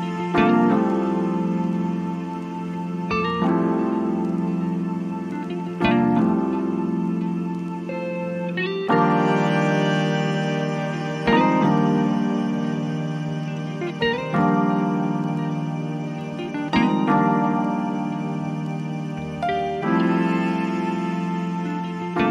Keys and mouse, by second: 0.2 click, 3.0 click, 9.0 click, 13.3-22.3 drag.